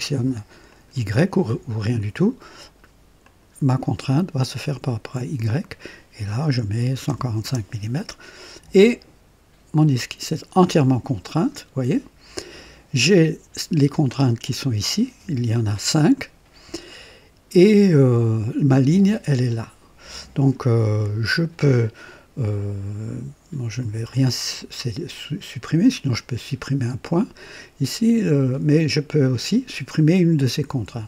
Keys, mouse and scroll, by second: 0.6 click, 3.1 click, 6.5 KP_1, 6.7 KP_4, 7.0 KP_5, 7.3 Return, 23.7 click, 25.0 click.